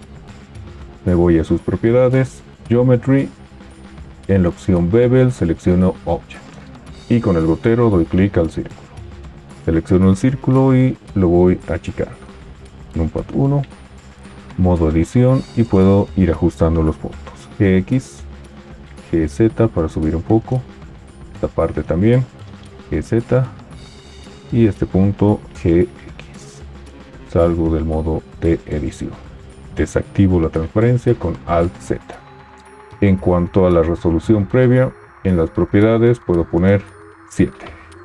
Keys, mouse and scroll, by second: 11.5 s, 12.9 KP_1, 14.5 Tab, 17.6 g, 17.6 x, 19.0 g, 19.0 z, 22.7 g, 22.7 z, 25.5 g, 25.5 x, 28.3 Tab, 30.3 alt+z.